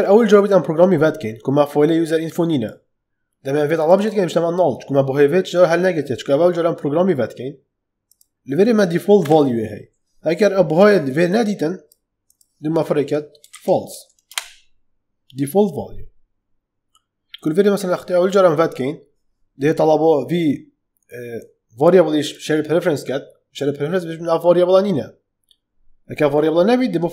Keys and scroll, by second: 9.1 ,, 13.1-14.3 typing.